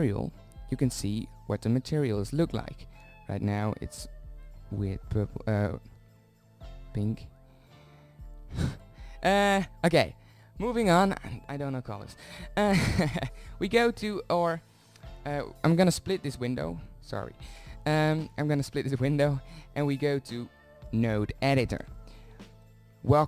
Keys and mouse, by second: 1.0-2.3 middle drag, 3.0-3.7 middle drag, 3.7-5.6 drag, 5.6-9.8 middle drag, 9.8-11.6 drag, 16.8-19.0 drag, 19.0 middle click, 19.4-22.3 drag, 22.3 middle click.